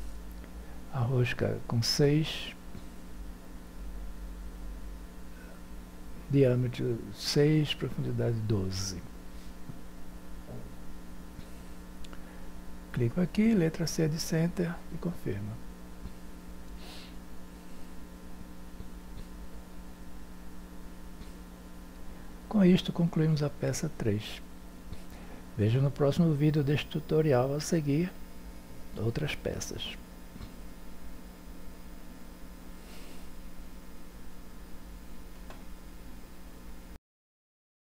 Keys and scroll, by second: 3.7 6, 9.5 1, 10.9 2, 11.5 Return, 14.2 c.